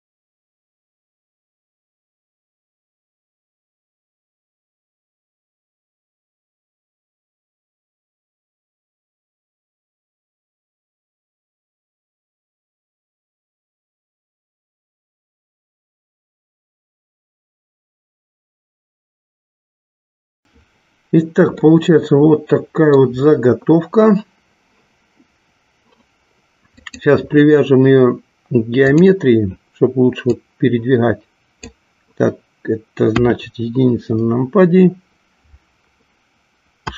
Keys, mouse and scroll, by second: 1.5 click, 3.5 g, 5.1 click, 7.1-8.9 drag, 11.2 click, 13.2 click, 17.6 click, 19.5-20.6 middle drag, 21.9-23.2 middle drag, 26.9-29.1 drag, 30.4-32.0 drag, 33.4 KP_1.